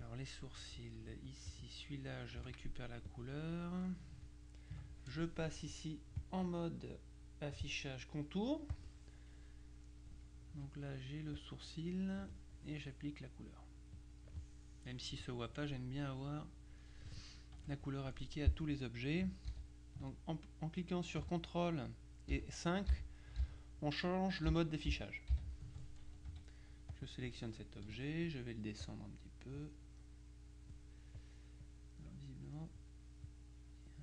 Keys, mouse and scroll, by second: 1.0 F2, 1.4 click, 2.5 F7, 3.2 click, 6.3 click, 8.8 click, 10.6 F2, 11.4 click, 14.0 click, 17.6 F1, 19.6 ctrl+KP_5, 22.4 ctrl+KP_5, 24.6 KP_5, 26.4 F2, 27.0 click, 27.9 F1, 28.9 click, 31.7 click, 32.8 click.